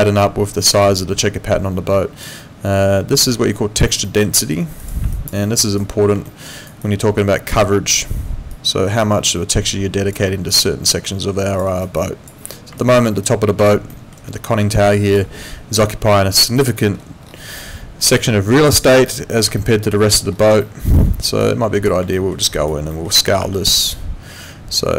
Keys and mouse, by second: 0.8 alt+click, 3.3 alt+click, 4.1 alt+middle click, 4.8 click, 5.1 alt+click, 5.4 alt+middle click, 5.6 alt+right click, 6.3 alt+middle click, 6.5 alt+right click, 6.8 alt+click, 8.5 click, 10.5 alt+click, 11.7 alt+right click, 12.0 alt+click, 12.8 alt+click, 13.0 alt+right click, 13.9 alt+middle click, 14.7 alt+click, 16.6 alt+middle click, 18.2 w, 18.6 click, 20.1 middle click, 20.6 alt+middle click, 21.4 click, 22.1 alt+middle click, 22.4 alt+right click, 22.9 alt+middle click, 23.4 r, 23.9 click.